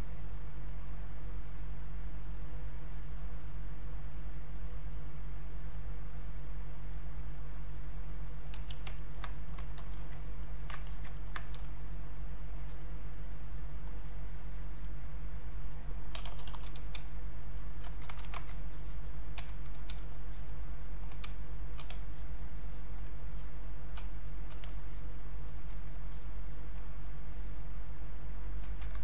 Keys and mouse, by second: 1.9 click, 3.0-5.8 drag, 5.8-8.5 drag, 8.5 q, 8.9 ctrl+right click, 9.5 click, 9.9 alt+click, 10.4 ctrl+right click, 10.9 ctrl+alt+click, 11.2 ctrl+right click, 11.6 space, 12.0 click, 12.1 space, 13.6-16.2 drag, 15.9-17.4 typing, 17.3 click, 18.2 ctrl+shift+Caps_Lock, 18.4 ctrl+shift+1, 18.7 click, 21.2 space, 21.6 click, 21.7 space, 22.1 alt+click, 24.0 space, 24.3 click, 26.1 alt+click.